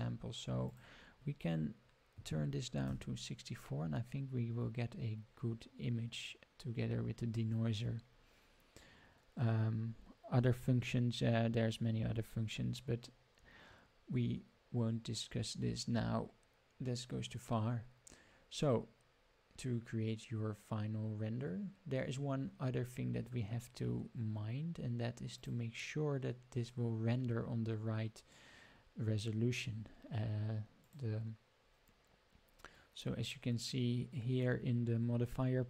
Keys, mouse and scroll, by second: 0.6-4.3 drag, 12.1-12.6 scroll down 2, 25.3 click, 30.8 click.